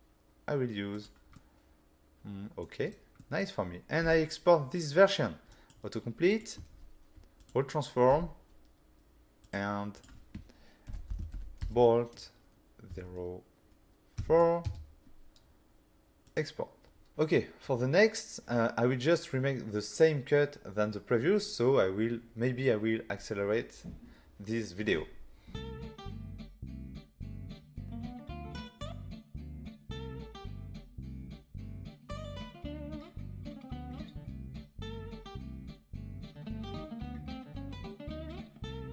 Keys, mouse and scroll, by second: 0.9 click, 1.4 middle click, 2.9 right click, 3.2 middle click, 4.0 f, 5.5 click, 6.3 click, 6.7 ctrl+a, 7.4 click, 8.1 n, 9.4 click, 9.9 click, 10.9-11.6 typing, 12.9 0, 14.2 4, 14.7 Return, 16.2 click, 17.1 click, 26.2 n, 26.7 click, 26.9 n, 27.4 click, 27.8 Delete, 29.3 click, 29.6 click, 30.0-30.5 typing, 30.3 click, 30.9 click, 31.3 click, 32.7 Delete, 33.3 click, 35.6 click, 37.6 click, 38.2 click, 38.7 middle click.